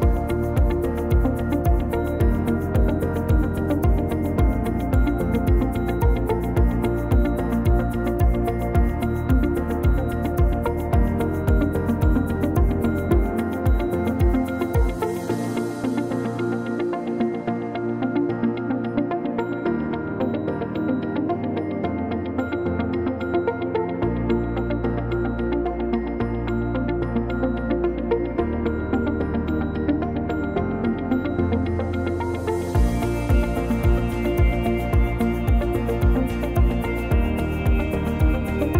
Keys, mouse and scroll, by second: 0.1 click, 0.6 scroll up 1, 0.8 shift+middle click, 1.7 click, 3.1 click, 4.1 ctrl+z, 4.5 click, 5.0 ctrl+z, 5.4 ctrl+z, 5.9 ctrl+z, 6.7 click, 8.3 click, 13.2 ctrl+click, 13.7-14.0 scroll down 2, 13.9 click, 14.2-14.6 scroll up 1, 14.6 click, 16.2 click, 18.7 click, 19.4 click, 19.9-20.4 scroll down 4, 20.4 middle click, 21.9 Tab, 22.3 scroll up 2, 23.2 alt+z, 23.6 click, 26.5 scroll down 1, 27.1 middle click, 27.1 click, 27.5 middle click, 27.8-28.3 scroll down 3, 28.1 middle click, 29.3 click, 29.7 scroll up 2, 30.1 shift+middle click, 30.5-30.9 scroll up 1, 31.4-31.8 scroll down 2, 31.9 click, 32.3 middle click, 33.5 middle click, 35.1 middle click, 37.2 ctrl+c, 37.6 ctrl+v, 38.0 click.